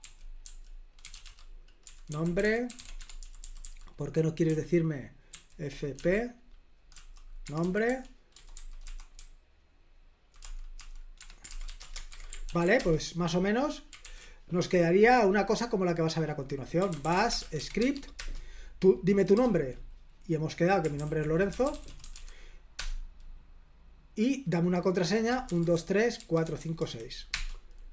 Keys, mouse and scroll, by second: 0.0-13.2 typing, 7.4 Escape, 14.0 ctrl+l, 16.5-18.0 typing, 18.1 Return, 21.2-22.6 typing, 22.7 Return, 25.0-27.2 typing, 27.3 Return.